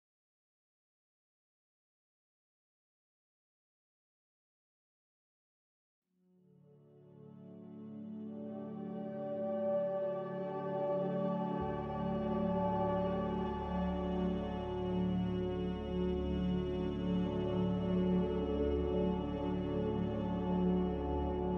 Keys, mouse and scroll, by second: 2.1 ctrl+z, 6.0 z, 9.1 a, 16.8 z.